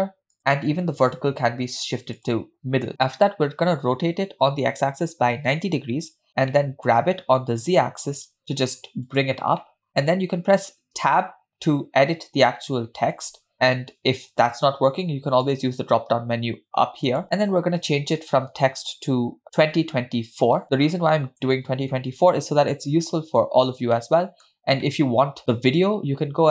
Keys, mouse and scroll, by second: 1.2-1.6 drag, 2.2-2.9 drag, 3.8 r, 6.6 middle click, 7.0 g, 9.7 middle click, 11.0 scroll down 1, 11.2 Tab, 15.5-17.2 drag, 17.6 BackSpace, 17.7 BackSpace, 17.8 BackSpace, 18.3 BackSpace, 19.6-21.5 typing, 20.7 Return, 22.8 Tab, 23.2-23.8 scroll up 3, 24.0-24.5 shift+middle drag, 24.9 middle click.